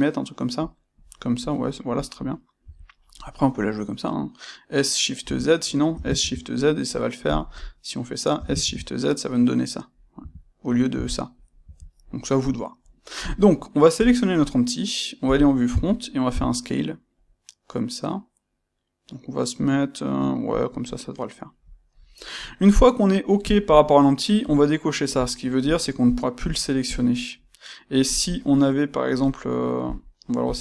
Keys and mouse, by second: 0.7 click, 5.2 Escape, 7.3 click, 7.4-13.9 middle drag, 10.2 Escape, 11.6 Escape, 13.9 click, 20.6 click, 24.4 click, 25.6 click, 26.0 click, 26.4 click, 26.8 click, 27.1-29.8 middle drag, 29.8 drag, 30.4 click.